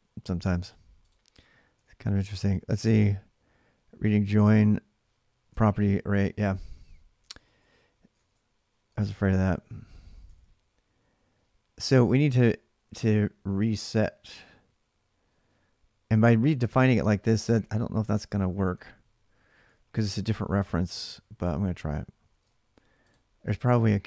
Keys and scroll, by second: 0.0-0.7 typing, 1.5 alt+Tab, 2.0 alt+Tab, 7.0-10.4 typing, 10.1 ctrl+[, 11.8-12.6 typing, 15.8-16.7 typing, 17.8-19.2 typing, 20.1 alt+Tab, 22.1 ctrl+r, 22.9-24.0 typing.